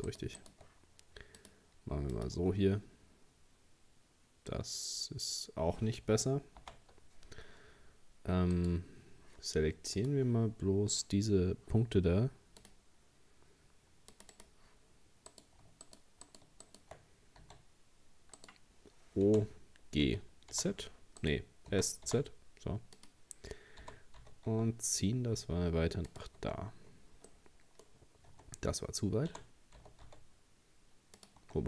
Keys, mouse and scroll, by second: 0.1 shift+right click, 0.4 shift+right click, 1.4 click, 2.4 Tab, 2.8-3.6 scroll down 1, 3.6-6.6 scroll up 2, 6.6 ctrl+z, 8.5 right click, 10.0-15.3 drag, 15.3 right click, 15.8 shift+right click, 16.3 shift+right click, 16.6 shift+right click, 17.4 s, 19.3 o, 20.1 g, 21.7 s, 23.8 g, 26.4 Tab, 26.8-27.3 scroll down 1, 27.3 middle click, 27.9-28.3 scroll up 3, 28.3 Tab, 29.3 g, 31.4 Tab.